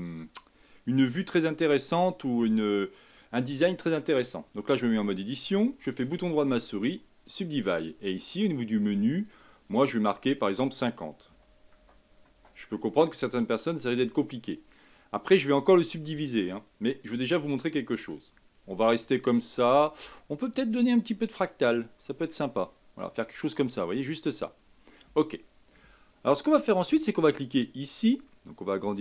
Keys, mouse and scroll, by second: 4.9 Tab, 5.9-9.1 right drag, 9.1-14.4 drag, 14.4-21.6 middle drag, 21.6-23.4 drag, 23.4-24.7 middle drag, 24.7 Tab, 27.9-29.0 drag.